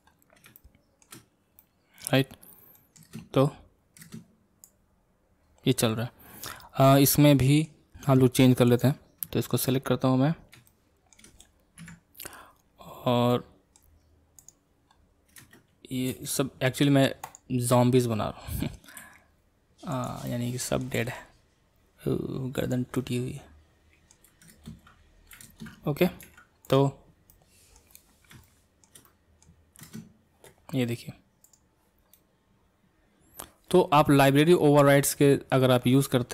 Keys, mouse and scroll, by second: 0.1-0.5 scroll up 1, 0.5-1.1 shift+middle drag, 1.1-1.6 scroll up 3, 1.6-2.4 middle drag, 2.4-2.7 scroll down 1, 2.7 middle click, 3.1 space, 4.0 space, 4.7-7.0 drag, 7.0 scroll up 1, 7.1-8.8 middle drag, 8.8 click, 9.7 ctrl+Tab, 10.2-10.7 scroll up 3, 10.7-11.8 shift+middle drag, 11.8 KP_Decimal, 12.1 KP_Decimal, 12.6-13.3 scroll down 9, 13.3-14.5 middle drag, 14.5 click, 14.9-16.1 scroll down 4, 16.1 r, 17.7-19.0 middle drag, 19.0 r, 20.3-21.0 middle drag, 21.0 r, 22.9-24.5 middle drag, 25.5 ctrl+space, 26.2 ctrl+Tab, 26.7 click, 26.9-27.3 scroll down 2, 27.3-27.9 middle drag, 27.9-28.4 scroll down 4, 28.4-29.8 shift+middle drag, 29.8 space, 31.5-32.1 drag, 32.1-35.1 middle drag, 35.6-36.3 middle drag.